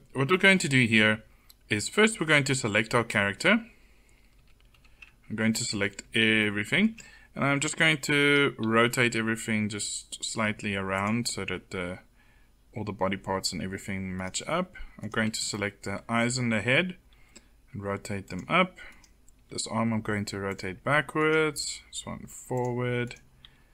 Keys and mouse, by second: 1.0 middle click, 4.3 a, 4.7 a, 5.8 middle click, 7.6 r, 8.6 r, 17.1 r, 19.3 r, 21.3 r, 23.3 r.